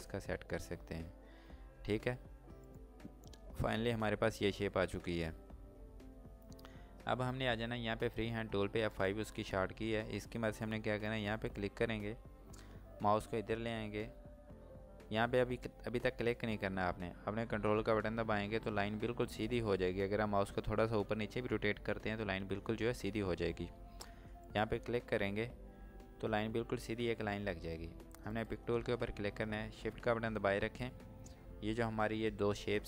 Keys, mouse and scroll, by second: 1.6 space, 2.1 scroll down 1, 2.7 click, 8.8 click, 24.5 ctrl+click, 28.4 click.